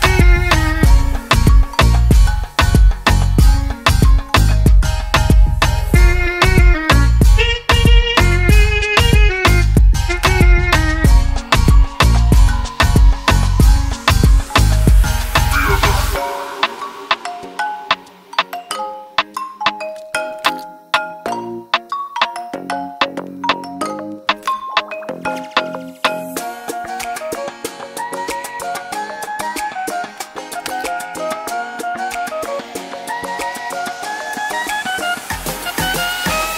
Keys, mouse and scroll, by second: 0.6 click, 3.4 Return, 5.5 click, 11.8-12.3 typing, 12.5 Return, 14.1 click, 15.5 click, 17.3 click, 19.1 click, 21.4 click, 22.2 Right, 22.6-23.8 typing, 24.5 Return, 26.5 click, 27.3 click, 28.7 click, 35.1 BackSpace, 36.4-36.5 typing.